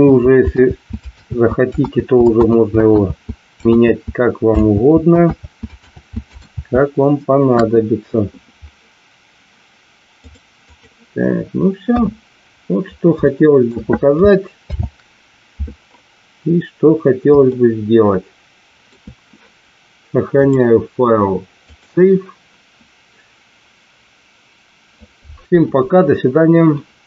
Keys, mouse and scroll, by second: 0.7 ctrl+z, 1.3 ctrl+z, 1.9 ctrl+z, 3.0 ctrl+z, 3.8 ctrl+z, 4.7 ctrl+z, 5.4 ctrl+z, 5.9 ctrl+z, 6.6 ctrl+z, 7.6 KP_1, 10.3 click, 11.8 KP_1, 13.2-13.5 shift+middle drag, 14.5 alt+h, 17.4-18.8 shift+middle drag, 20.4-21.8 drag.